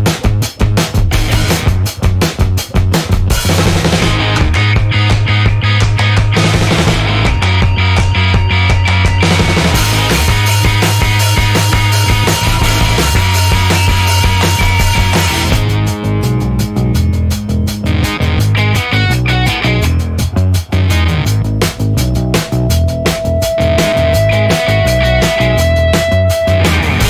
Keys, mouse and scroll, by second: 0.1-1.7 scroll down 6, 3.6 click, 5.3-6.1 drag, 6.3 click, 6.8 click, 7.5 click, 8.3 click, 8.7 click, 10.1 o, 10.9 click, 11.7 click, 13.2 click, 17.4 click, 19.5-20.0 scroll down 2, 20.6-21.1 scroll up 2, 23.5-25.3 drag, 25.5-27.0 drag.